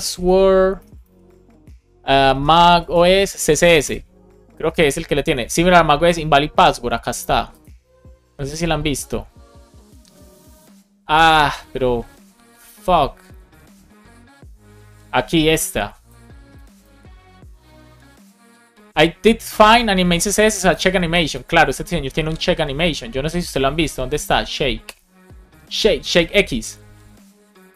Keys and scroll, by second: 0.6 BackSpace, 1.2 space, 2.6 space, 3.7 Return.